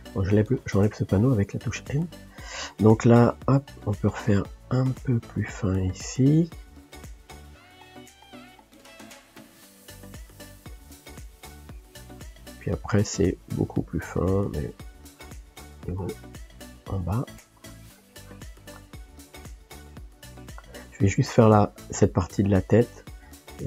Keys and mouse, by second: 1.2-12.1 drag, 12.1-13.6 middle drag, 13.6 f, 14.6-16.8 drag, 16.8 middle click, 17.3-18.8 drag, 18.8-19.8 shift+middle drag, 19.8-22.0 drag, 22.0 middle click, 22.8-23.6 drag.